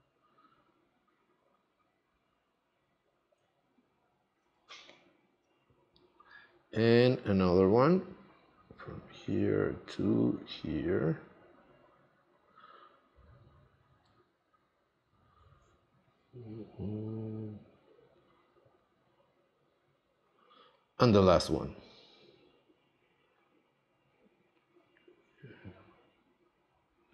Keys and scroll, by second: 4.6 space.